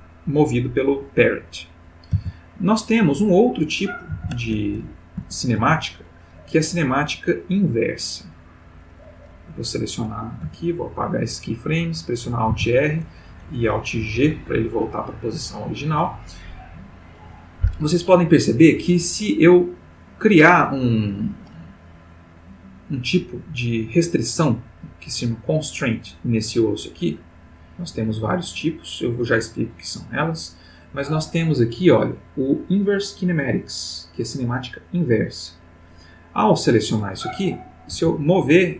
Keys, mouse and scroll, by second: 1.1 click, 2.1 alt+r, 3.3 alt+click, 4.1 alt+r, 5.2 a, 5.6 x, 5.9 click, 7.9 click, 9.3-9.8 drag, 10.4 x, 10.7 click, 12.5 alt+r, 14.0 alt+g, 15.4 click, 22.8 click, 27.3 click, 35.2 click, 37.9 g.